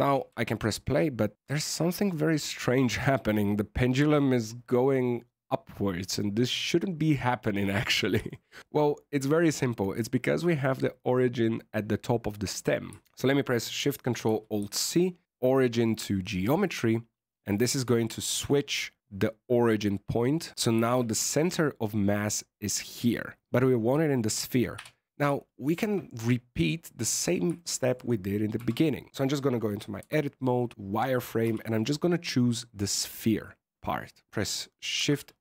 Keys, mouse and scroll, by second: 0.7-1.3 scroll down 7, 1.3 middle click, 2.3 middle click, 8.2 shift+middle click, 14.5 ctrl+alt+shift+c, 17.8 scroll down 3, 18.1 shift+middle click, 20.9 alt+a, 21.2-23.4 scroll up 4, 24.7 KP_1, 25.4 shift+middle click, 26.7 click, 27.1 click, 27.5 shift+middle click, 28.2 scroll up 1, 28.5 Tab, 29.9 z, 30.5 right click, 31.4 c, 34.9 shift+s.